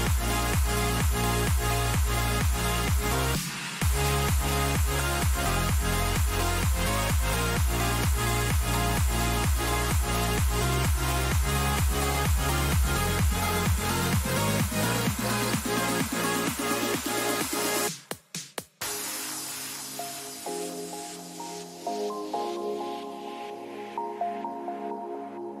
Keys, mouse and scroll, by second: 2.1-4.1 right drag, 3.0-6.7 drag, 4.1 a, 4.5-6.7 right drag, 6.2 a, 7.5-8.5 right drag, 8.5 click, 8.7 a, 9.8-11.9 right drag, 11.9 middle click, 12.0-13.9 drag, 14.7-16.1 middle drag, 16.1 a, 16.9 right click, 17.5-18.7 middle drag, 19.1-20.6 drag, 20.6-24.9 middle drag, 20.8 click, 21.8 a, 22.5-24.6 right drag, 24.5-25.6 drag.